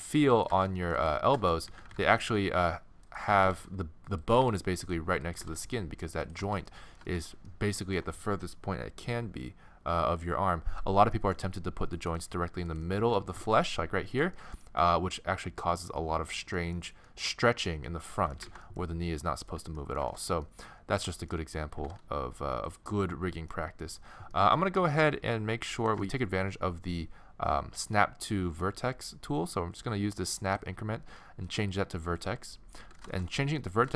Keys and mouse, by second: 0.0-0.2 typing, 0.5 click, 1.7 z, 2.3 z, 3.1 right click, 3.4 g, 3.6 click, 4.4 g, 5.4 click, 5.4 g, 6.5 middle click, 12.0-13.8 middle drag, 13.3 g, 14.6-15.9 middle drag, 18.5 ctrl+z, 21.8 g, 25.8-29.5 middle drag, 30.5-32.3 drag, 32.8-33.9 middle drag.